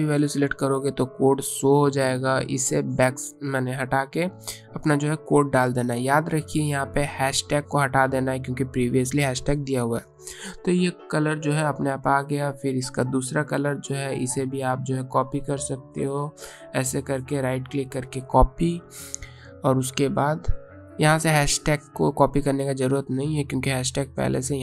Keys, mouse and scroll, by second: 2.5 BackSpace, 3.9 ctrl+v, 6.6 click, 7.6 BackSpace, 8.7 click, 17.3 right click, 18.1 click, 20.9 click.